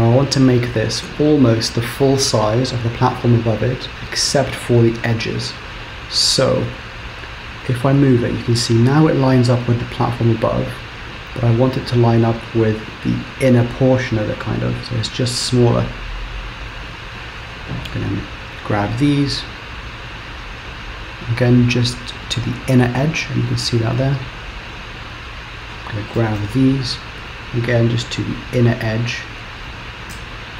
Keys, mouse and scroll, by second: 0.5-3.6 scroll down 2, 5.1 KP_7, 5.9 scroll up 3, 7.7 g, 16.7 click, 17.3 click, 19.2 g, 24.4 click, 24.8 click, 26.2 g, 30.2 Tab.